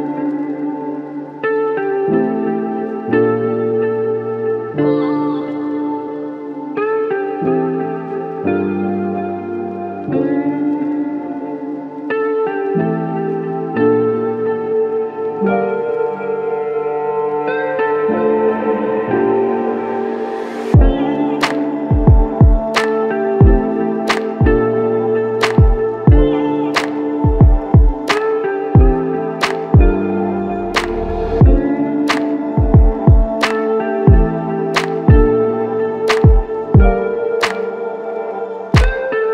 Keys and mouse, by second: 18.8 alt+click, 20.6 double click, 23.0 ctrl+click, 29.1 alt+click, 35.6 alt+click, 37.2 ctrl+click.